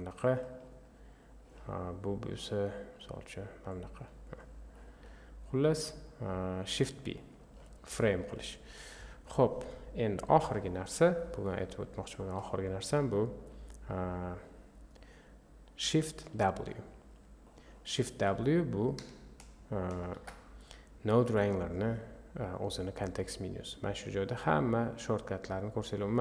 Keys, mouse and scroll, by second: 0.3-1.4 drag, 2.4 click, 4.3-5.8 drag, 17.9-26.2 drag.